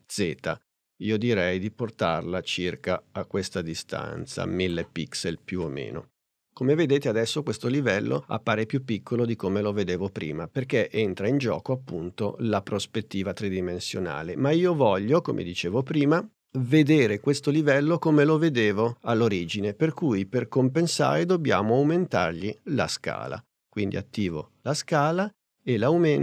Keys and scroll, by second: 24.2 s.